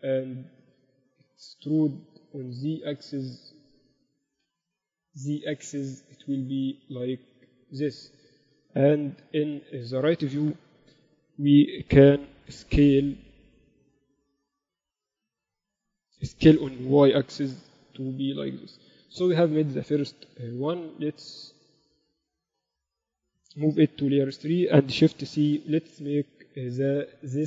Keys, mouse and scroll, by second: 0.3 click, 0.3-2.5 right drag, 2.5 KP_1, 4.0 z, 4.9 e, 9.2 KP_3, 11.8-14.0 middle drag, 14.0-16.0 drag, 15.2 s, 17.2 s, 19.1 Tab, 20.6 KP_1, 24.0 m, 25.4 shift+c.